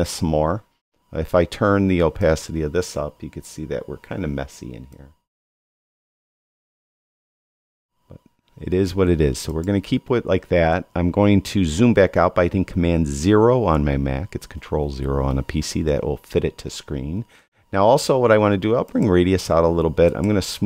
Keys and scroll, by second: 14.2 super+0.